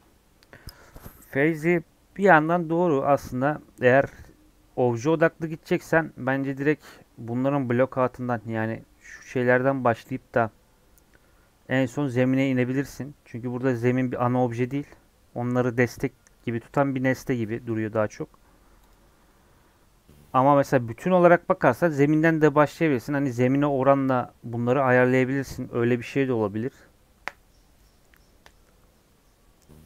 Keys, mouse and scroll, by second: 18.9 click.